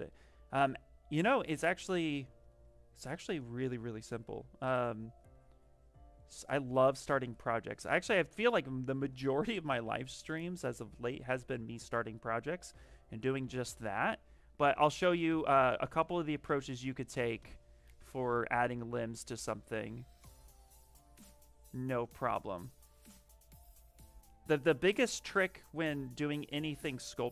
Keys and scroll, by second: 1.0 s, 10.6 s, 12.5 s, 14.3 s, 18.0 s, 23.5 s.